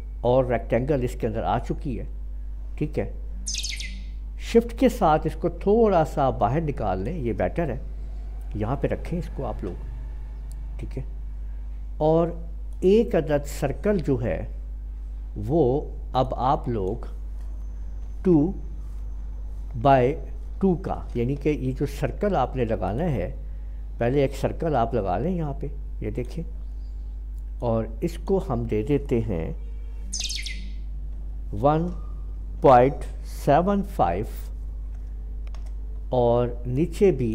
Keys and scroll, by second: 18.0 2, 19.9 Tab, 20.6 2, 21.3 Escape, 31.1 typing, 32.6-33.8 typing, 35.4 Return.